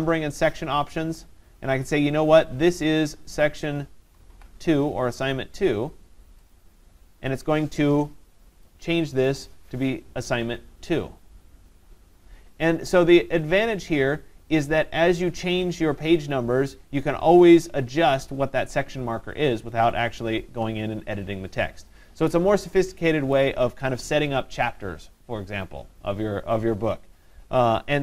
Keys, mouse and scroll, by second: 0.8 click, 3.5 click, 4.3 click, 6.5 click, 9.0 click, 9.0 click, 9.3 click.